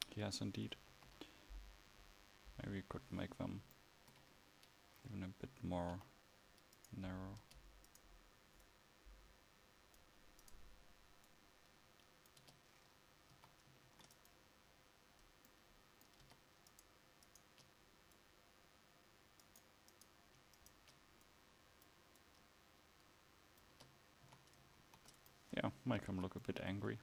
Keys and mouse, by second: 0.0 Escape, 1.1 KP_1, 6.0 h, 7.5 Tab, 10.1 click, 12.5 Tab, 13.4 a, 14.0 ctrl+s, 16.4 Tab, 19.9-23.9 drag, 23.9 Tab, 24.4 a, 24.9 ctrl+s, 26.2 a.